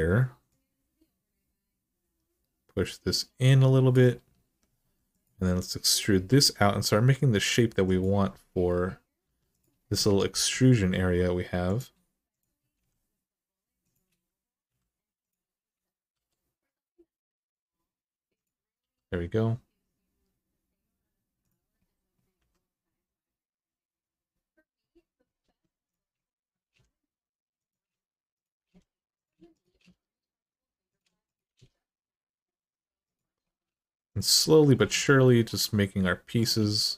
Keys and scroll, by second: 4.6 2, 5.9 e, 9.0 1, 10.1 g, 12.5 g, 14.4 2, 15.9 e, 18.6 e, 22.1 2, 25.2 1, 26.4 g, 28.4 g, 29.5 g.